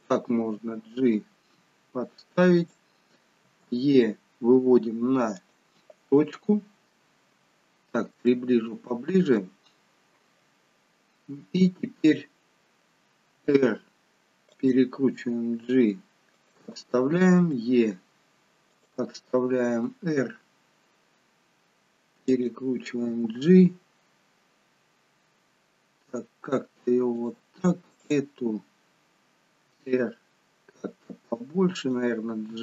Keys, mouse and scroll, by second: 0.4 g, 3.6 e, 6.3-6.9 scroll down 2, 7.7 scroll up 4, 8.3 shift+middle click, 9.6 scroll up 1, 13.4 r, 15.1 g, 17.4 e, 19.7 r, 23.1 g, 27.9 click, 29.6 r, 32.4 g.